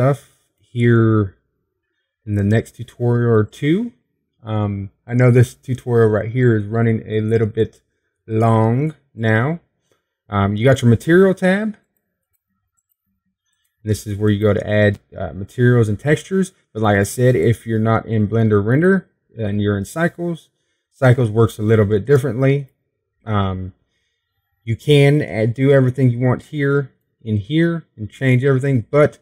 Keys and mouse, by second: 4.2-19.1 drag, 26.1-29.2 drag.